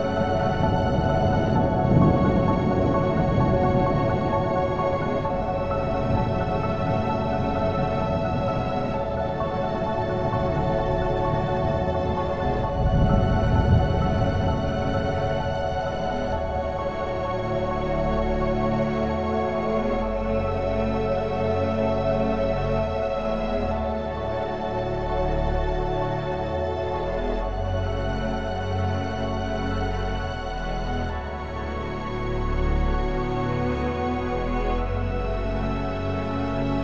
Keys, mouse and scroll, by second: 1.0 ctrl+r, 2.5 right click, 3.0 ctrl+r, 7.9-10.5 right drag, 12.6 click, 13.7 3, 14.8 b, 18.4 b, 22.5-24.5 drag, 27.0 click, 28.0 b, 30.6 b, 34.9 b.